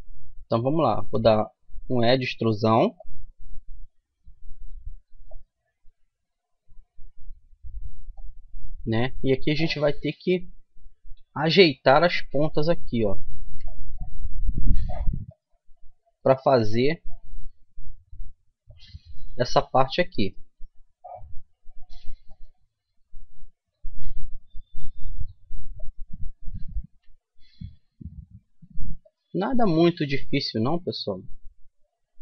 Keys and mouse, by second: 1.0 e, 5.3-7.1 drag, 8.1-10.1 drag, 11.9-13.5 right drag, 13.5 g, 16.2-17.9 right drag, 16.5 g, 20.2-22.1 right drag, 20.6 g, 23.5 g, 24.4 right click, 26.6-28.3 right drag, 26.9 g, 30.5-32.2 right drag, 30.9 g.